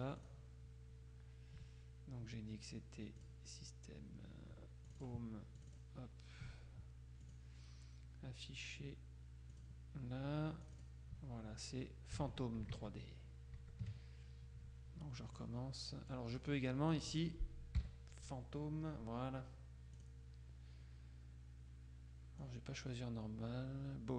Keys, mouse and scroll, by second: 0.4 click, 3.3 click, 5.0-6.4 drag, 7.4 click, 9.6 click, 10.8 click, 12.4 alt+Tab, 13.7 Tab, 15.4 click, 17.9 p, 20.0 click, 22.5-24.1 drag.